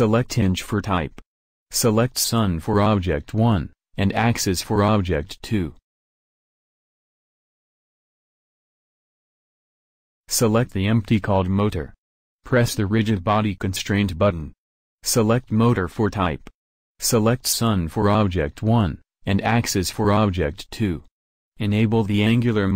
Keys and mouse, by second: 3.8-6.6 drag, 7.3-9.0 drag, 11.3-12.5 drag, 12.5-15.5 middle drag, 15.5 click, 16.5-18.3 drag, 20.6-22.3 drag.